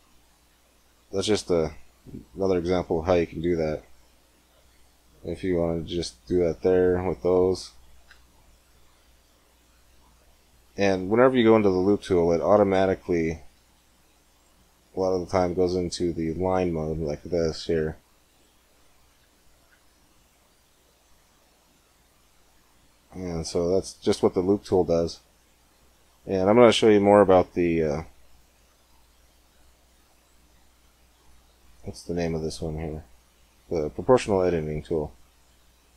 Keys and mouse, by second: 3.6 middle click, 4.4 ctrl+r, 9.0 click, 9.8-11.1 drag, 11.1 middle click, 11.3 click, 11.8 middle click, 12.6 ctrl+r, 13.0 click, 18.4-21.6 drag, 28.2-30.0 drag, 30.0 middle click.